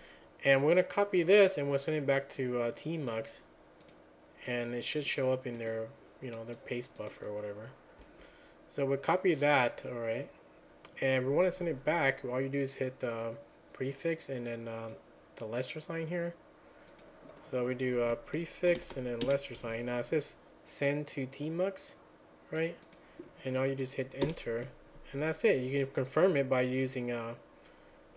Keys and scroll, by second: 19.3 ctrl+a, 19.3 <.